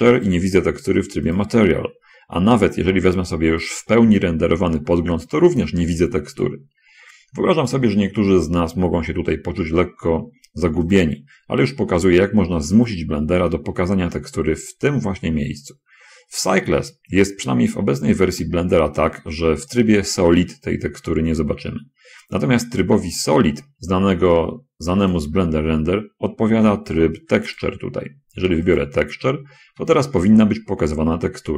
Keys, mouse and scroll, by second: 0.6 click, 1.7 click, 2.8 click, 4.1 click, 8.4 middle click, 11.3 click, 15.5-15.9 scroll down 1, 17.5-18.7 drag, 22.1 middle click, 25.2 click, 27.9 click, 29.1 click.